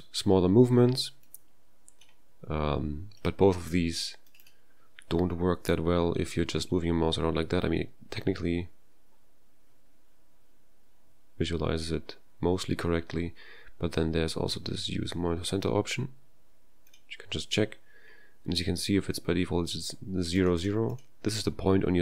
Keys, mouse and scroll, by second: 1.2-2.0 drag, 3.2 click, 4.3 click, 4.4 click, 16.9 click, 20.4 click, 20.6 click, 20.9 click.